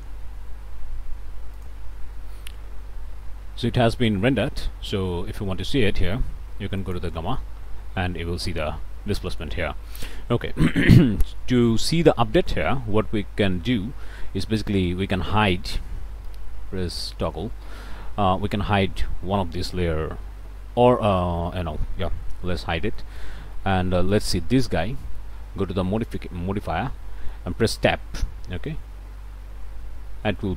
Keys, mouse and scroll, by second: 1.6 click, 3.3 scroll down 1, 4.0 click, 4.1-4.4 scroll down 1, 4.5 scroll up 1, 6.8 ctrl+shift+click, 9.9 ctrl+shift+click, 13.8 click, 14.6 click, 16.3 z, 18.0 alt+a, 18.5 alt+click, 20.8 scroll up 2, 21.5 middle click, 22.4 h, 22.9 shift+click, 23.5 shift+click, 24.1 shift+click, 24.8 shift+click, 26.0 click, 27.0 click, 28.6 Tab, 29.3 Tab, 30.4 click.